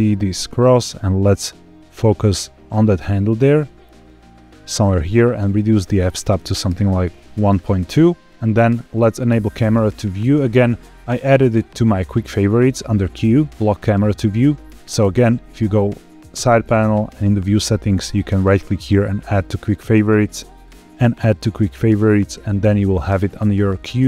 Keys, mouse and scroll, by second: 5.3-6.6 drag, 7.5-8.3 scroll up 2, 8.8 n, 8.9 q, 14.8 n, 16.8 click, 18.2-19.6 right drag, 20.5-21.4 right drag.